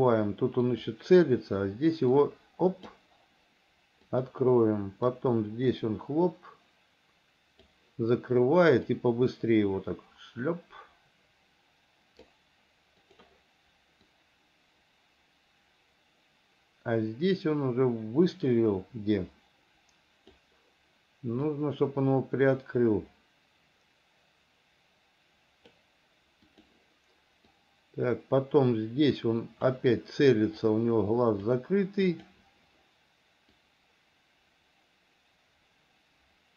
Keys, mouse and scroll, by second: 0.9 click, 2.4 click, 4.3 click, 5.4-8.0 drag, 9.1-12.6 drag, 13.3 click, 14.4-20.6 drag, 21.8-25.9 drag, 26.7 click, 27.8-30.0 drag, 30.9 click, 32.3 click, 33.8-36.5 drag.